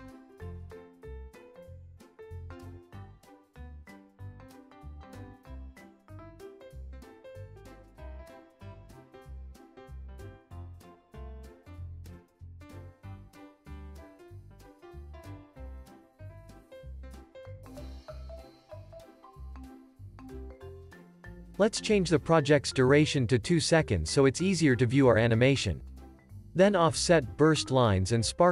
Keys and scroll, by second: 0.5 super+s, 4.2 super+g, 4.6 super+s, 5.9 super+s, 14.1 super+s, 23.3 BackSpace, 24.6 2, 24.8 Return.